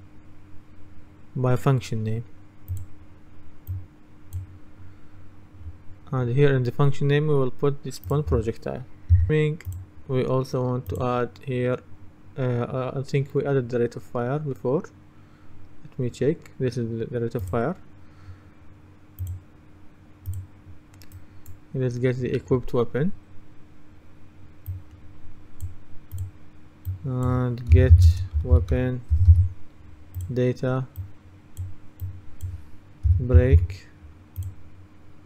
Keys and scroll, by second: 27.6-29.9 typing, 32.9-34.1 typing.